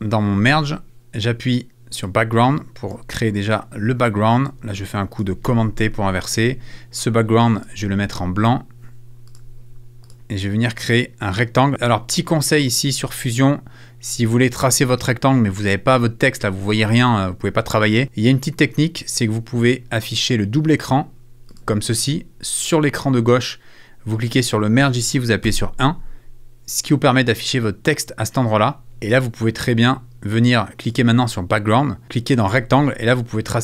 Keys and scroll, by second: 5.5 super+t, 25.4 i.